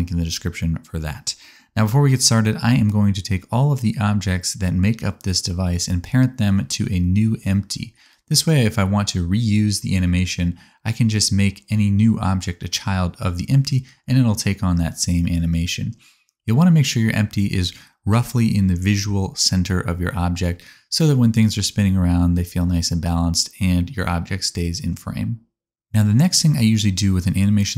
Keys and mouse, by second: 0.6-2.3 drag, 2.3-4.9 shift+middle drag, 4.9 click, 5.0-11.1 middle drag, 8.9 shift+a, 11.1-16.5 drag, 14.2 alt+z, 14.5 c, 16.5-20.1 middle drag, 16.9 alt+z, 18.2 ctrl+p, 20.1 click, 20.1-23.5 middle drag, 23.5 click, 23.6-24.6 middle drag, 24.2 click, 24.6-27.2 drag, 24.6 r, 27.2 middle click, 27.6-27.7 drag.